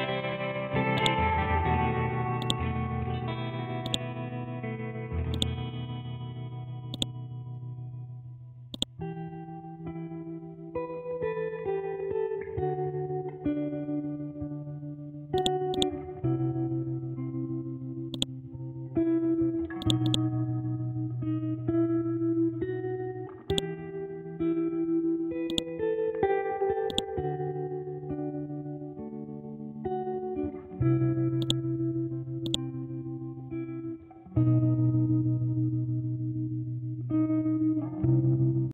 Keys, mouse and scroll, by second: 0.6 t, 0.9 click, 1.3 scroll down 1, 1.9 scroll up 1, 2.4-5.3 drag, 5.7 scroll down 1, 6.9 click, 9.9 Down, 13.2 Up, 14.2-14.7 scroll down 1, 14.7 scroll up 1, 15.3-19.3 drag, 19.3 ctrl+g, 19.8-22.3 drag, 22.3-22.6 scroll up 1, 23.5-26.9 drag, 27.7 scroll down 1, 28.9-30.0 scroll up 1, 30.0 scroll down 1, 31.4-38.7 drag.